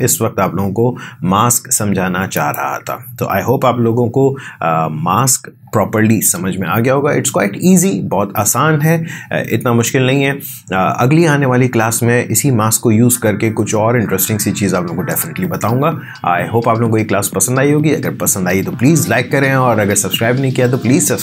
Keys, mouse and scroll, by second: 2.3 click.